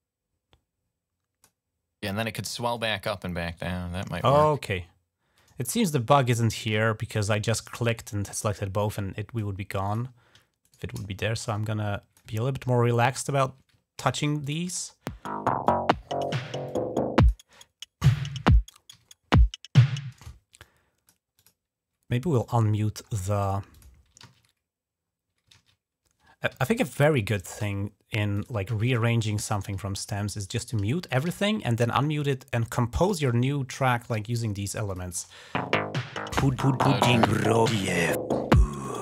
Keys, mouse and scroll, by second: 2.6-4.1 drag, 5.4 ctrl+scroll up 4, 6.6 click, 8.2-9.2 drag, 9.7 click, 10.5 shift+right click, 11.2 click, 12.2 ctrl+scroll down 1, 13.0 ctrl+scroll up 2, 13.8 ctrl+s, 14.2 ctrl+click, 14.5 space, 15.5 click, 16.5 click, 17.4 middle click, 17.4 scroll down 1, 18.0 middle click, 18.0 scroll down 1, 18.8 g, 18.9 scroll down 1, 19.9-20.7 typing, 20.4-21.8 drag, 21.0 right click, 21.3 right click, 22.3 click, 22.9 scroll up 1, 23.3 click, 23.5 typing, 24.9 scroll up 1, 25.4 ctrl+z, 26.3 g, 26.5 click, 26.8 ctrl+scroll up 2, 27.2 click, 27.4 typing, 28.2 click, 28.5 typing, 28.7 click, 29.2 click, 29.7-30.3 ctrl+scroll down 1, 30.3 click, 30.4-31.6 typing, 30.9 click, 31.6-32.6 scroll up 2, 33.1-33.7 scroll up 3, 34.7 click, 35.0 space, 36.9 click.